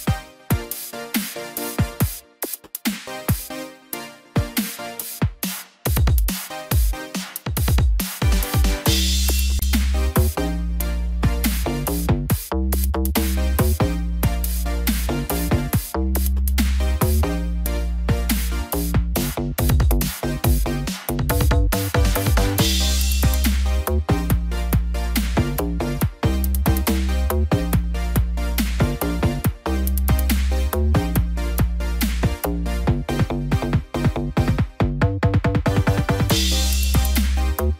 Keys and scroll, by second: 11.5 ctrl+z, 23.9 ctrl+j, 24.3 ctrl+t, 30.2 ctrl+-, 36.4 ctrl+0.